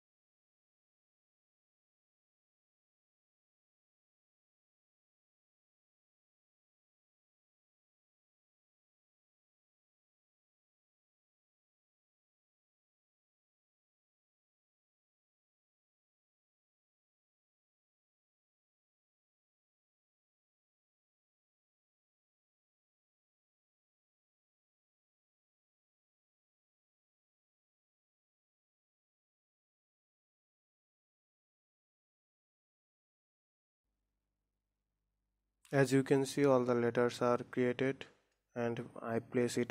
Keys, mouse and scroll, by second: 0.0 click, 0.2 Tab, 0.6 Tab, 0.7 click, 1.0 s, 1.3 g, 2.5 g, 3.0 click, 3.2 click, 3.9 g, 4.3 Tab, 4.5 middle click, 4.7 Tab, 5.2 KP_7, 5.8 r, 7.7-11.4 typing, 12.2 click, 12.5 g, 13.3 r, 14.8 KP_7, 15.1 r, 17.3 KP_1, 18.2 r, 19.2 scroll up 1, 19.3 shift+middle click, 19.6 g, 20.9 g, 21.9 Tab, 22.1 Tab, 22.2 click, 22.6 scroll down 2, 22.8 click, 23.1 Delete, 23.4 scroll down 2, 23.5 click, 23.9 Tab, 24.4 shift+click, 24.6 Tab, 24.8-25.3 scroll up 3, 25.3 click, 25.8 j, 26.0 click, 26.3 l, 26.7 g, 27.4 click, 27.8 l, 28.1 g, 29.4 Tab, 29.6 click, 29.9 click, 30.1 g, 31.7 click, 32.0-32.3 scroll down 2.